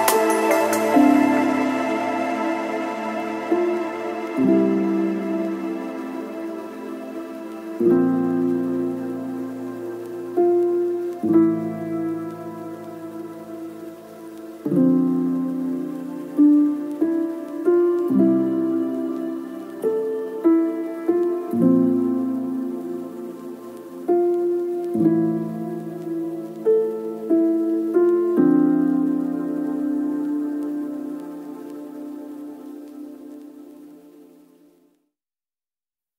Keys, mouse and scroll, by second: 0.2 shift+middle click, 1.0 middle click, 1.6 shift+middle click, 2.6 shift+click, 3.7 click, 4.7 ctrl+shift+middle click, 4.9 click, 5.2 middle click, 5.8 click, 10.3 click, 11.3 click, 13.4 shift+click, 14.3 shift+click, 15.2 click, 15.8 click, 15.9 KP_0, 16.3 click, 16.4 KP_5, 16.8 click, 16.9 KP_0, 17.1 click, 17.2 KP_5, 21.0 click, 21.1 middle click, 21.3 click, 23.2 middle click, 23.3 Tab, 23.5 KP_Divide, 23.6 middle click, 23.8-24.6 ctrl+r, 24.8 ctrl+r, 25.0 click, 25.1 shift+middle click, 25.6 ctrl+r, 25.6 click, 26.0 ctrl+r, 26.3 click, 26.6 ctrl+r, 26.6 click, 26.6 a, 26.9 click, 27.6 click, 28.0 click, 28.1 a, 28.2 3, 28.2 ctrl+g, 28.4 click, 29.0 click, 29.4 click, 29.8 click, 30.0 click, 31.3 click, 32.3 middle click, 32.4 Tab, 32.5 middle click, 32.7 a, 33.4 click, 34.0 ctrl+middle click, 34.6 click, 34.9 click, 35.3 middle click, 35.9 alt+middle click.